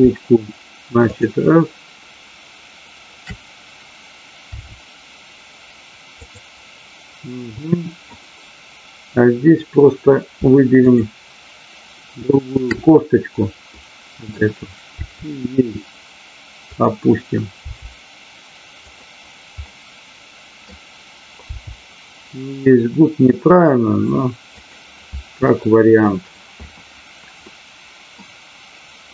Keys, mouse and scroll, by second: 1.0 shift+click, 4.5 r, 6.1 click, 7.6-8.1 middle drag, 10.8 shift+click, 12.5-13.4 shift+drag, 13.6-14.4 middle drag, 14.9 r, 16.7 click, 17.6 g, 18.9 click, 19.8 middle click, 24.6 click, 25.4 scroll up 1, 25.6 middle click, 27.4 scroll up 1, 27.5 middle click.